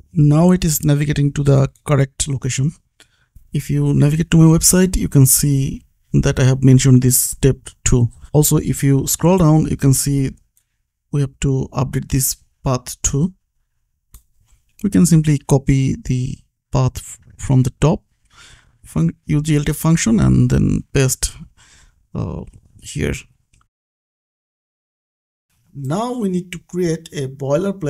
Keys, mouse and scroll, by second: 0.0-0.1 typing, 0.7 click, 1.2 ctrl+s, 1.5 click, 2.5 scroll down 1, 4.9 click, 7.6 click, 7.7 scroll down 1, 9.0 click, 13.4 click, 14.1 scroll up 1, 15.1 click, 16.1 shift+click, 16.6 ctrl+c, 17.3 click, 17.7 ctrl+v, 19.0 v, 19.5 ctrl+s, 20.3 click, 22.6 scroll down 1, 25.4 click.